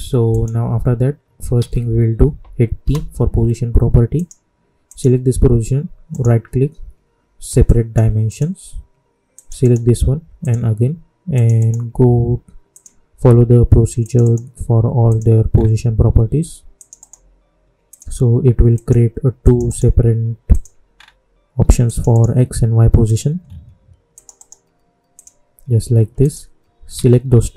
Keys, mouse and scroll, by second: 0.2 click, 1.5 ctrl+a, 2.8 p, 4.1 click, 6.1 right click, 7.6 click, 9.6 right click, 10.4 click, 11.5 right click, 12.7 click, 14.2 right click, 15.0 click, 15.0 click, 15.5 scroll down 1, 16.7 click, 16.9 right click, 17.8 click, 19.6 right click, 20.5 click, 20.9-21.2 scroll down 1, 21.8 click, 22.1 right click, 23.0 click, 24.1 click, 24.3 right click, 25.1 click, 26.9 ctrl+a.